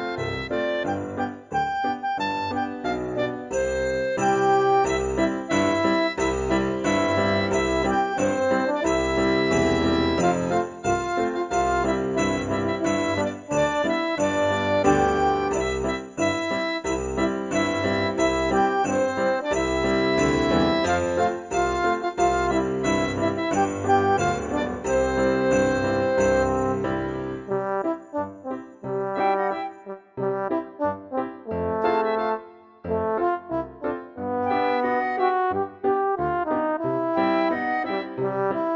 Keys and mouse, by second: 0.9 shift+a, 5.3 click, 6.0 middle click, 6.4 s, 7.0 z, 9.4 click, 9.6 g, 9.9 x, 11.0 click, 11.2 shift+middle click, 12.6 s, 14.4 click, 14.8 s, 15.3 x, 17.5 click, 17.7 s, 17.9 x, 18.5 click, 19.1 shift+middle click, 21.1 s, 21.7 z, 22.8 click, 22.9 g, 23.1 z, 23.7 click, 24.2 g, 24.9 x, 25.5 click, 26.3 KP_7, 27.8 r, 28.2 click, 29.0 Tab, 29.5 a, 30.2 shift+d, 30.9 click, 31.3 alt+z, 32.4 r, 32.9 click, 33.0 g, 34.1 click, 34.9 shift+d, 36.0 click, 36.5 r, 37.2 click, 37.6 middle click, 38.3 alt+z, 38.5 middle click.